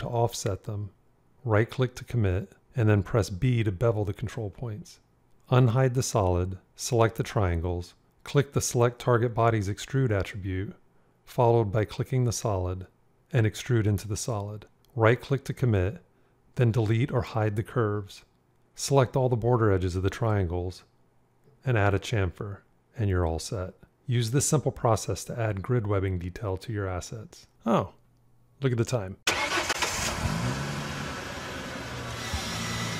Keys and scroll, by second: 3.2 b.